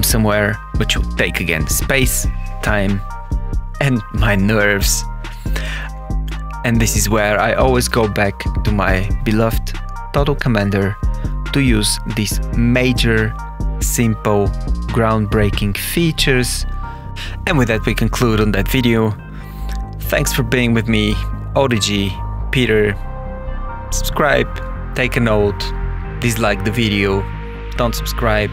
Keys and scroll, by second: 6.5 BackSpace, 6.7 ö, 8.1 BackSpace, 8.5 Menu, 9.1 Escape, 9.9 Tab, 11.3 Return, 12.5 Down, 12.9 Up, 13.2 Return, 13.5 Up, 13.9 Escape, 14.3 Up, 14.7 Return, 15.2 Up, 16.1 Down, 16.3 Return, 18.1 Page_Up, 18.4 Down, 21.6 Return, 22.6 Right, 25.9 Left, 26.5 Down, 26.5 Right.